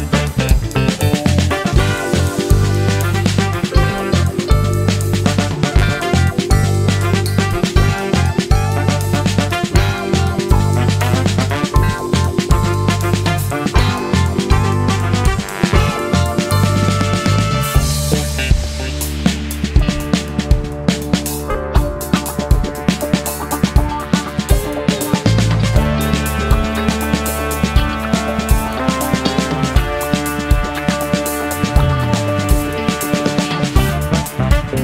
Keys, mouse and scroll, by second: 0.2 click, 2.5 5, 2.9 0, 3.2 Return, 4.2-6.0 drag, 7.0 ctrl+shift+click, 8.3-9.8 drag, 11.4 click, 12.4 2, 12.9 5, 13.4 Return, 17.1 click, 17.5 click, 19.8 click, 23.4 click, 26.8 click, 27.9-29.8 drag, 30.9 ctrl+d, 32.4 click, 33.5-34.8 ctrl+shift+drag.